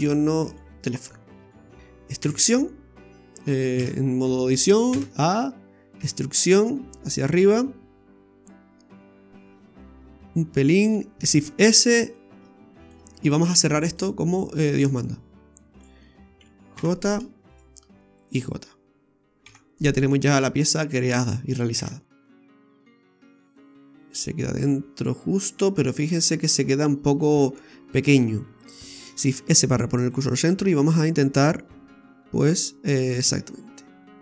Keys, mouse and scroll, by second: 0.5 click, 1.4 middle click, 2.2 e, 3.5 click, 3.8 Tab, 4.9 a, 6.0 e, 11.3 shift+s, 12.2 s, 14.0 click, 14.8 right click, 15.7 shift+right click, 16.7 j, 17.5 right click, 18.2 shift+right click, 19.4 j, 19.8-20.1 scroll down 3, 20.1 middle click, 21.8 Tab, 22.2 middle click, 23.4 click, 23.7 middle click, 28.1-29.1 scroll up 2, 29.2 shift+s, 30.6 s.